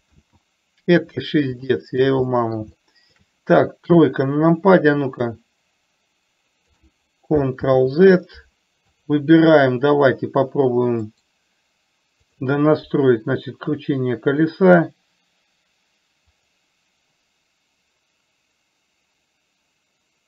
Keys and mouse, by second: 0.5 ctrl+z, 2.1 shift+middle click, 2.6 middle click, 3.3 shift+middle click, 4.3 KP_3, 5.8-7.1 drag, 8.0 ctrl+z, 9.4 click.